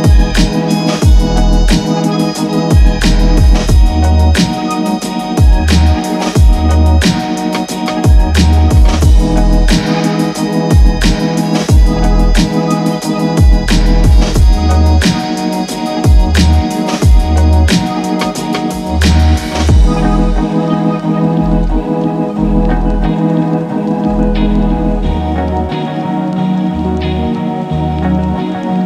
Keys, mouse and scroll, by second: 2.8 click, 9.9 click, 10.8 typing, 10.9 Tab, 13.7 typing, 15.8 click, 15.9 click, 18.2 Tab, 19.8-20.5 typing, 20.2 click.